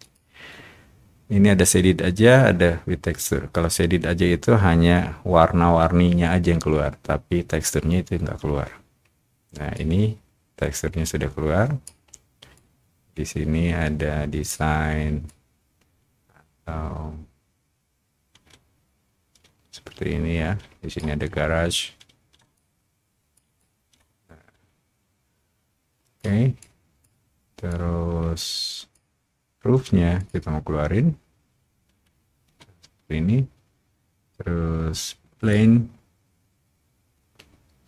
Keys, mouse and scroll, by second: 0.0 click, 9.7-11.8 drag, 12.5-14.4 drag, 15.2-20.9 drag, 22.5 shift+click, 23.5-26.1 shift+drag, 26.5 shift+click, 27.6 click, 27.9 shift+click, 30.1 click, 35.4 click.